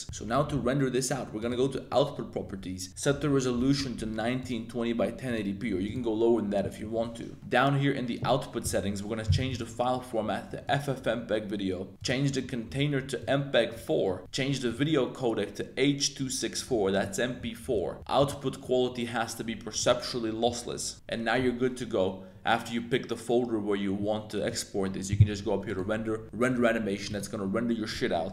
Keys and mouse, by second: 4.2 click, 5.3 click, 9.4-10.8 drag, 12.0-13.4 drag, 14.7-16.9 drag, 17.0 click, 18.1-19.9 drag, 25.8-26.6 drag.